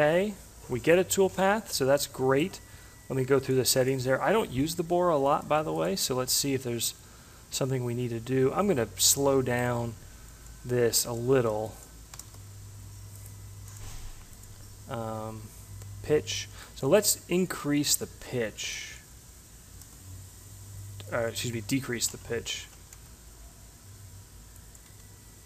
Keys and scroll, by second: 10.8 1, 11.4 0, 19.4 1, 22.2 0, 22.9 5, 24.9 1.